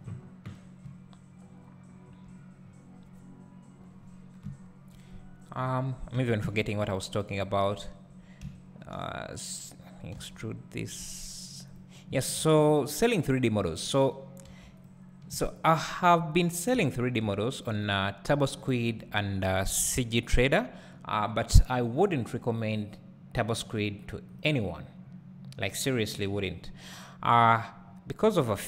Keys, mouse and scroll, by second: 0.6 scroll up 2, 0.8 `, 2.6-3.7 scroll down 2, 3.7-4.4 scroll down 1, 4.4 KP_1, 5.6-6.2 scroll up 2, 6.2 Tab, 10.1 e, 11.8 click, 12.4 ctrl+r, 13.6 click, 14.5 3, 14.8-16.8 drag, 16.8 `, 17.9 click, 18.6-19.8 shift+drag, 19.8 KP_7, 27.5 click, 28.3 `.